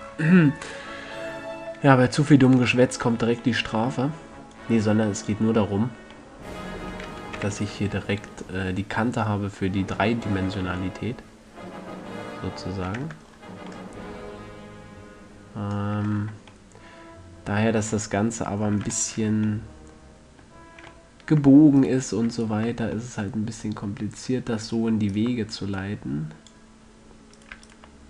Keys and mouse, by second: 0.4-2.8 middle drag, 2.8-4.0 right drag, 4.9-6.7 drag, 6.7-7.7 middle drag, 7.7 z, 9.6-10.8 middle drag, 10.8 a, 11.4-12.7 middle drag, 13.3 Tab, 16.3 Tab, 17.1 middle click, 22.1-27.9 middle drag, 27.9-28.0 right drag.